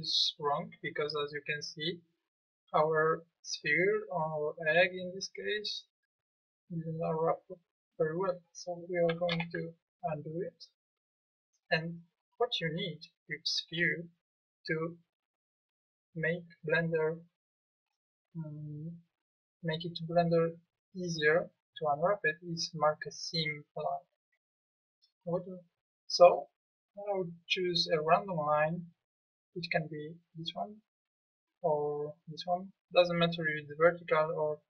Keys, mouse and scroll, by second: 9.3 ctrl+z, 13.7 KP_1, 32.3-34.6 middle drag.